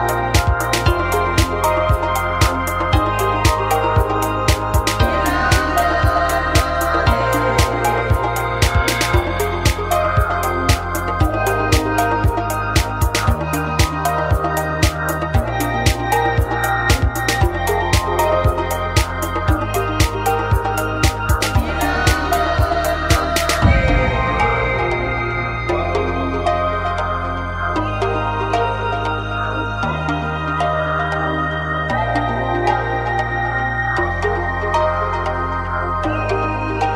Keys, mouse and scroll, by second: 0.3 click, 0.7 s, 1.2 click, 1.4 s, 2.6 click, 2.9 s, 3.7 g, 4.9 s, 5.0 click, 6.4 click, 7.0 g, 8.5 click, 10.5 s, 12.8 click, 20.3 s, 21.3 click, 21.6 middle click, 25.3 KP_3, 27.4 r, 29.8 click, 31.2 r, 33.0 click, 34.5 click, 35.3 z, 35.7 click, 36.6 click.